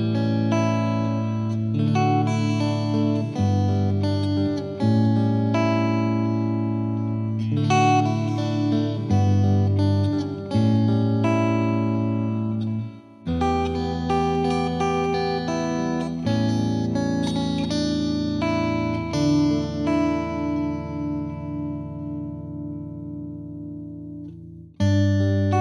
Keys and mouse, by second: 0.1 Escape, 0.3 F3, 1.1 click, 1.2 F2, 1.5 click, 3.0 click, 3.4 click, 3.9 click, 4.8 click, 5.2 Escape, 5.2 F3, 5.9-7.0 drag, 9.8 click, 10.9 click, 11.0 click, 14.0 click, 14.6 click, 15.1 click, 15.4 click, 15.4 click, 15.8 click, 16.9 click, 17.7 click, 17.8 shift+click, 18.1 click, 18.9 click, 19.0 shift+click, 19.4 shift+click, 19.5 Page_Up, 19.9 ctrl+z, 20.2 Page_Down, 20.7 click, 21.3 click, 22.1 click, 22.8 click, 23.0 click, 24.5 click, 25.4 click.